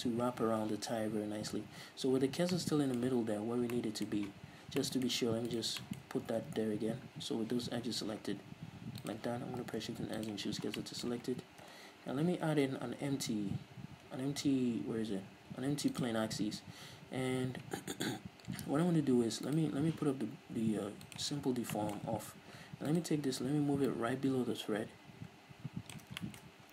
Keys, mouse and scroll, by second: 1.3-2.7 scroll up 2, 5.8 right click, 6.0-9.4 shift+middle drag, 6.2 scroll up 2, 6.5 Tab, 7.1-9.4 scroll up 2, 9.4 click, 9.8 shift+s, 10.7 scroll down 2, 11.0 Tab, 11.1-19.8 middle drag, 11.8 KP_3, 12.9 shift+a, 16.5 scroll down 2, 16.7-19.8 scroll up 2, 19.8-21.4 right drag, 21.4 click, 21.9-23.1 shift+middle drag, 23.1-24.1 right drag, 24.1-26.4 drag, 26.4-26.7 shift+middle drag, 26.6-26.7 scroll up 6.